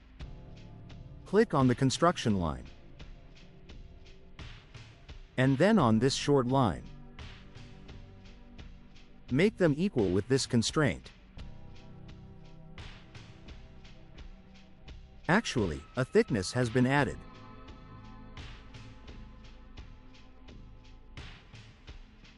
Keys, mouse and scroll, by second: 0.5 click, 1.1 middle click, 1.3 middle click, 1.7 right click, 2.2 middle click, 2.9 right click, 3.8 right click, 5.1 click, 6.1 scroll down 2, 6.4 right click, 11.4 click, 16.5-20.3 drag.